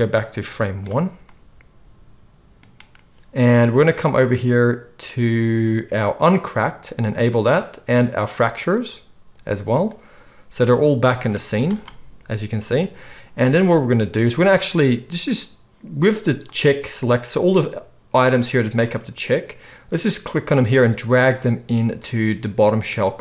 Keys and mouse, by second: 6.6-8.3 middle drag, 8.3 click, 8.4-16.3 middle drag, 11.4 z, 16.3 click, 16.5-18.1 middle drag, 18.1 shift+click, 18.2 shift+middle click, 18.8 shift+click, 19.3-20.4 middle drag, 20.4-22.6 drag, 22.6-23.2 middle drag.